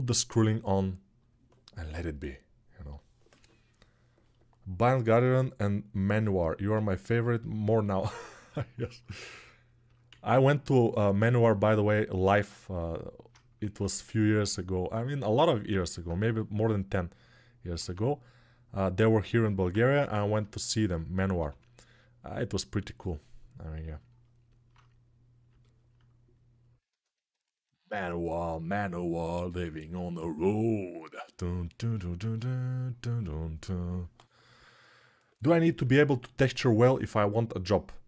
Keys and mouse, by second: 5.1-7.5 drag, 7.5-11.7 alt+shift+right drag, 9.9 alt+z, 11.7-22.2 alt+drag, 13.3 ctrl+Tab, 16.0 g, 17.6 alt+q, 21.1 f, 22.2 middle click, 23.0-38.0 drag.